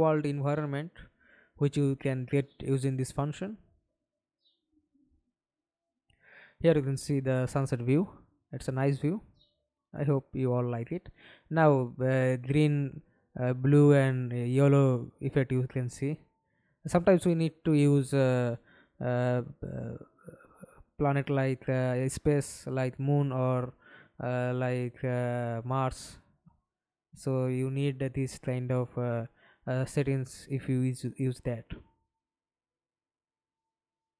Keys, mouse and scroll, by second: 0.5-3.3 scroll down 21, 3.3-3.9 scroll down 4, 3.9-5.0 scroll down 10, 5.0-5.5 scroll down 2, 5.5 scroll down 6, 5.9 scroll up 2, 9.4-10.1 scroll down 5, 12.1-13.4 scroll down 10, 13.5 scroll up 2, 14.5-15.7 scroll down 6, 15.7-17.1 scroll down 5, 17.1-20.3 scroll down 5, 20.3-21.4 scroll down 8, 22.3-25.8 scroll down 31, 26.3-28.1 scroll down 12, 28.1 scroll down 3, 28.9-31.0 scroll down 11, 31.0-31.8 scroll down 2, 31.8-33.3 scroll down 17, 33.3-34.1 scroll down 27.